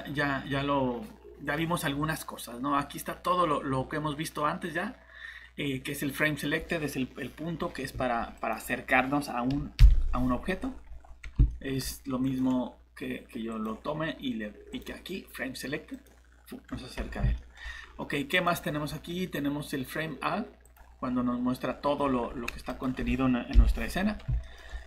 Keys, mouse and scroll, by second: 7.9 shift+Escape, 9.8 ., 10.5 scroll down 1, 11.5 middle click, 12.2 click, 16.6 scroll down 1, 17.4 middle click, 18.3 click, 21.7-22.0 scroll up 1, 22.7 click, 24.4 middle click, 24.6 scroll up 1.